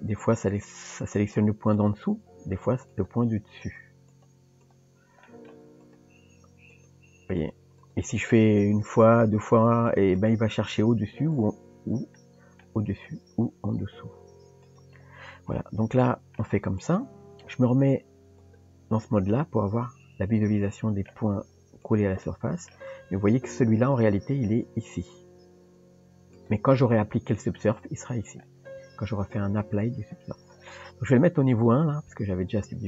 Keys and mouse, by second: 0.5 click, 1.7 click, 2.9 click, 3.7 click, 4.1 click, 4.6 click, 5.3 middle click, 6.7 click, 7.4 click, 7.8 click, 8.6 click, 8.8 click, 9.1 click, 9.4 click, 9.9 click, 10.1 click, 10.7 click, 11.4 click, 12.2 middle click, 15.6 middle click, 16.8 click, 18.5 click, 19.4-21.1 middle drag, 21.8 click, 22.3 middle click, 31.5 click.